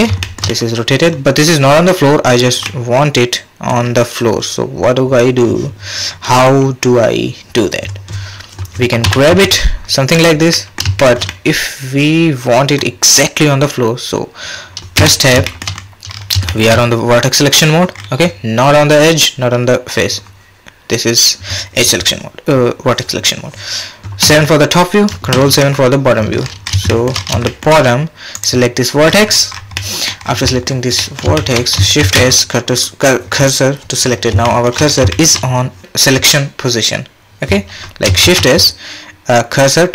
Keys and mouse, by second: 0.2 shift+click, 0.5 click, 0.8 middle click, 2.6-3.8 middle drag, 9.0 g, 10.5 middle click, 11.0 shift+drag, 11.3-12.8 middle drag, 15.0 Tab, 15.4 shift+click, 16.5 shift+click, 24.2 KP_7, 25.3 KP_7, 26.9 shift+click, 27.5 shift+click, 29.8 middle click, 30.5 middle click, 31.0 middle click, 31.4 shift+middle click, 32.0 shift+s, 34.5 shift+click, 35.1 shift+click, 36.1-37.2 middle drag, 38.2 shift+s.